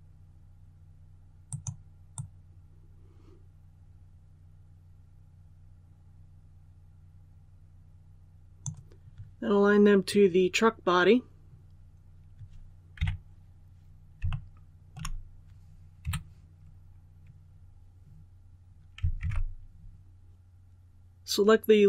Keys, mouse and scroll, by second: 1.4-8.9 drag, 9.9-11.0 scroll up 1, 12.9 KP_3, 14.2 shift+middle click, 15.9 2, 19.1 alt+a.